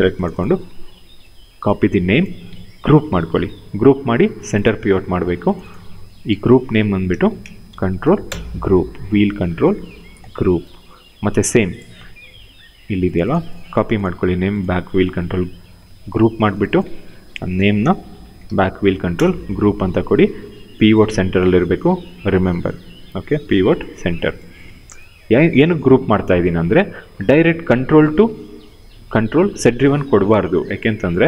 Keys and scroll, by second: 0.9 ctrl+c, 2.6 ctrl+g, 5.9 ctrl+v, 6.7-8.0 typing, 13.4 ctrl+c, 15.5 ctrl+g, 16.9 ctrl+v, 17.1-18.6 typing, 18.9 Return.